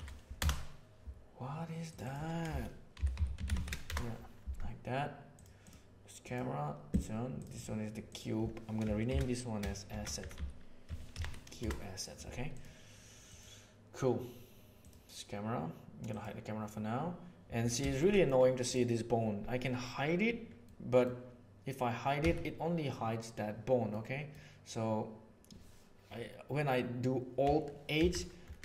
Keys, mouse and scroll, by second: 1.9-4.7 drag, 5.6 drag, 6.2 click, 7.5-12.3 drag, 10.3 s, 16.0 click, 17.9 shift+middle click, 18.1 middle click, 20.6 click, 22.2 h, 23.9 click, 27.9 alt+h.